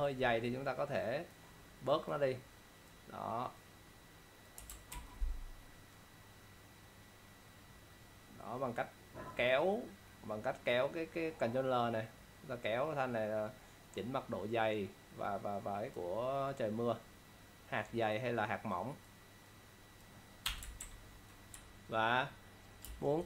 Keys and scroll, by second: 5.0 ctrl+l, 20.9 ctrl+0, 22.9 ctrl+space.